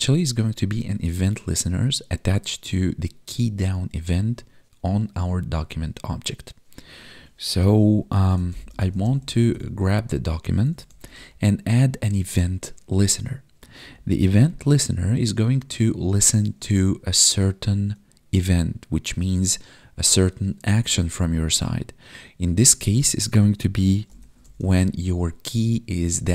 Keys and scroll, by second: 12.5 Tab.